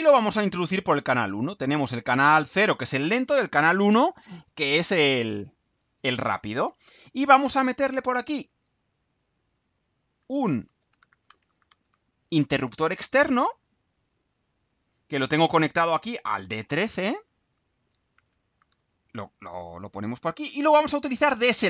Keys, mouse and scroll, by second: 0.2-1.3 drag, 2.1-3.1 drag, 4.4-7.1 right drag, 8.5 click, 10.4-12.4 typing, 12.6 Return, 14.7 click, 16.9 click, 18.1 shift+d, 18.6 shift+1, 19.1 shift+3, 19.4 click, 20.3-21.6 drag.